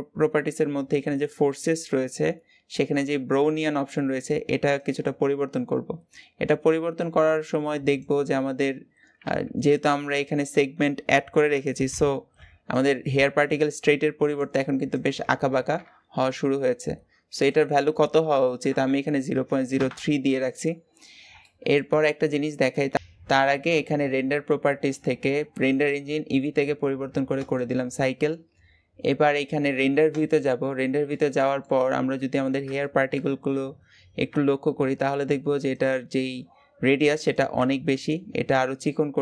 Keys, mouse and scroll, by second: 5.5-20.2 drag, 21.3-27.5 shift+middle drag, 27.5-28.6 drag, 29.9 click, 31.1-31.7 shift+middle drag, 31.7-32.1 scroll up 2, 32.6-33.1 shift+middle drag, 33.1-33.5 scroll up 2.